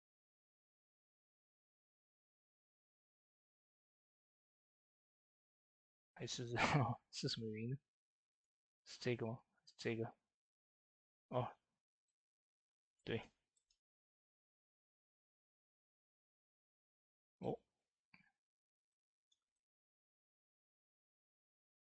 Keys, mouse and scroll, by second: 0.7 ctrl+z, 3.1 ctrl+z, 3.1-3.5 scroll up 3, 3.3 typing, 3.6 ctrl+z, 6.6-7.9 scroll down 2, 7.9 scroll down 1, 8.1 click, 8.9-9.4 scroll down 1, 9.4 click, 11.3 typing, 13.3 shift+middle click, 14.9 click, 19.0 shift+middle click, 19.7 scroll up 2, 20.0 middle click, 20.8 click, 21.4 typing, 21.5 scroll up 1.